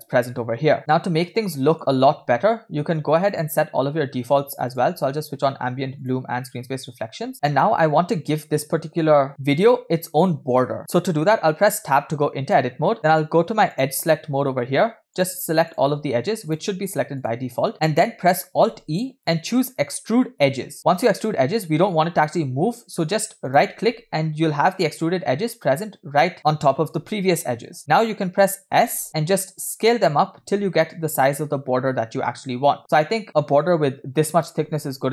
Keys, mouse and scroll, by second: 1.4 middle click.